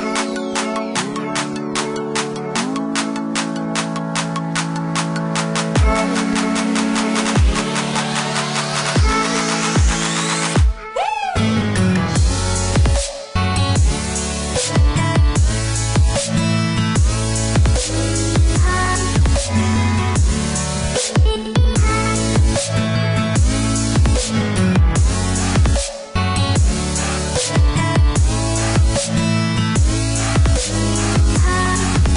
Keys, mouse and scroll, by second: 1.4 middle click, 4.6 click, 6.0 click, 8.6 middle click, 11.1 click, 12.7 click, 16.2 click, 17.6 click, 18.4 click, 19.8 click, 23.9 click, 26.2 click, 27.6 middle click, 29.5 click, 30.7 middle click.